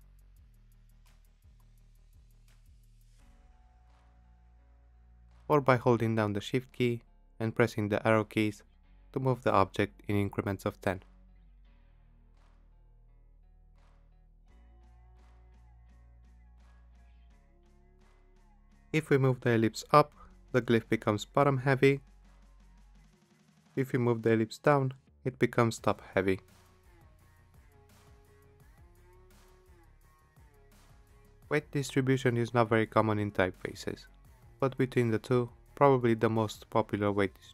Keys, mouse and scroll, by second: 0.1 Left, 0.2 Left, 0.3 Left, 0.9-1.2 Down, 1.6 Down, 1.6 Down, 2.0-2.6 Up, 5.8 shift+Down, 6.9 shift+Down, 8.7 shift+Up, 11.4 shift+Left, 12.8 shift+Right, 19.1 shift+Up, 22.3 click, 24.6 click, 26.2 shift+Down, 27.3 shift+Up, 27.5 shift+Up, 27.6 shift+Up, 28.9 click.